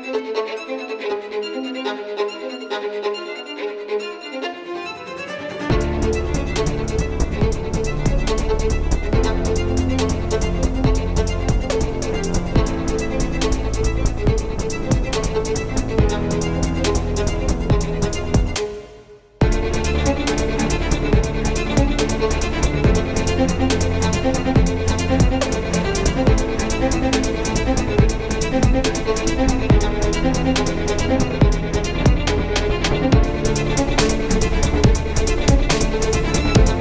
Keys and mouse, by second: 2.0 t, 2.6 t, 3.9 t, 5.6 t, 7.5 KP_5, 8.7 KP_7, 11.0 KP_7, 11.8 KP_5, 12.5 z, 17.5 Tab, 18.7 z, 19.1 c, 19.7 z, 19.9 c, 21.5 shift+d, 23.9 s, 26.6 s, 28.4 s, 30.0 z, 31.6 ctrl+Tab, 32.2 z, 33.8 z, 34.8 Tab, 36.0 KP_7, 36.5 z.